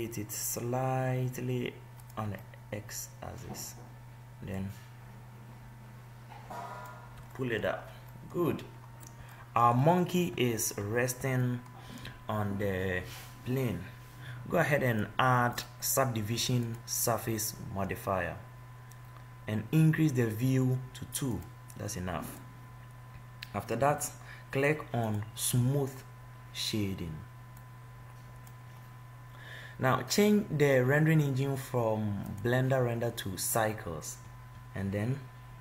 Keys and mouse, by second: 2.8-4.6 middle drag, 4.8-7.6 drag, 6.8 right click, 7.6-8.9 middle drag, 13.8-15.4 middle drag, 17.7-19.4 middle drag, 25.3 click, 26.8 click, 28.0-29.8 drag, 32.6-34.2 drag, 34.5 click.